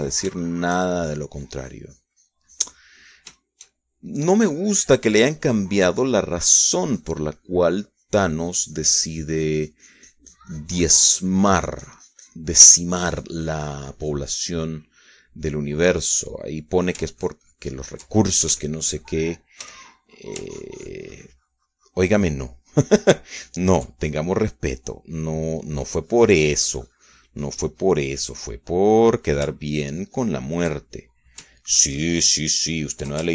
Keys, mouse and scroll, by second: 2.3 shift+middle click, 2.6-4.8 shift+drag, 4.8-5.9 shift+middle drag, 6.2 middle click, 7.0-14.7 drag, 14.7 middle click, 14.8-16.6 drag, 16.7 middle click, 17.2-18.6 drag, 18.8 ctrl+click, 20.2 d, 20.6 click, 21.3 f, 21.8 click, 22.1-25.8 ctrl+drag, 25.8-27.6 ctrl+middle drag, 27.6-31.0 drag, 31.0 middle click, 31.3-32.9 ctrl+drag, 32.9 middle click.